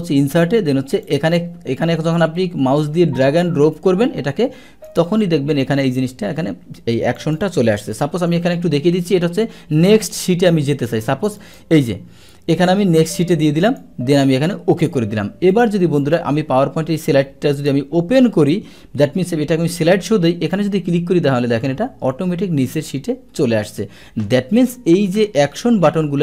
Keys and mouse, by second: 1.0 click, 1.8-4.9 drag, 7.2 click, 11.4 click, 13.6 click, 14.8 click, 15.5 click, 16.0 click, 18.7 shift+F5, 20.5 click, 26.1 Escape.